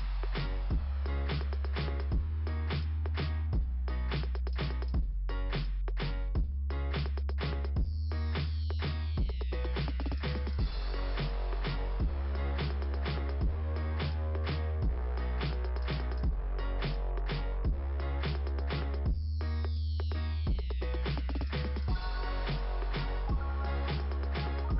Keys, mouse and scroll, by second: 0.7 click, 2.1 scroll down 3, 8.1 click, 8.2 click, 9.1 click, 10.5 click, 13.7 click, 13.8 click, 16.4 click, 17.7 click, 17.8 click, 18.5 click, 18.6 click, 18.7 click, 18.8 click, 18.9 click, 19.0 click, 20.3 click, 20.4 click.